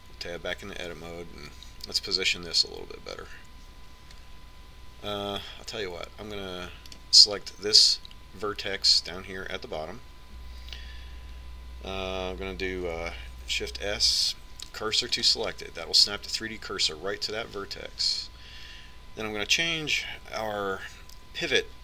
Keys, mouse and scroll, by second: 1.0 Tab, 2.8-4.8 drag, 8.2-10.1 right drag, 14.6 shift+s.